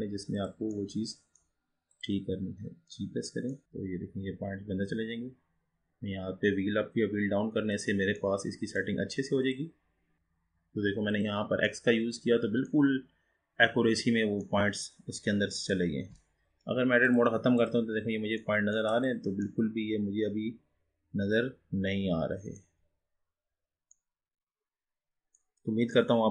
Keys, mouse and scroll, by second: 0.8-1.9 middle drag, 1.9 click, 3.6 middle click, 3.6 g, 8.3-9.5 middle drag, 9.5 click, 11.7-13.1 middle drag, 13.1-13.6 scroll down 5, 13.6-14.8 scroll up 5, 14.8-17.2 middle drag, 17.2-18.5 drag, 18.5-19.1 middle drag, 19.1 click, 19.4-22.8 middle drag, 23.1-23.6 scroll down 4, 23.6-24.1 scroll up 5, 24.1-26.3 middle drag.